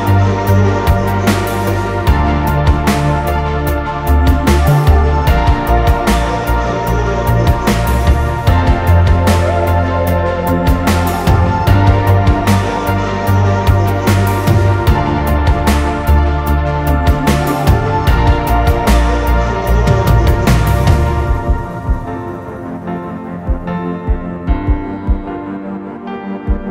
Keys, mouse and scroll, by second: 1.7 Return, 14.3 shift+click, 15.8 shift+click.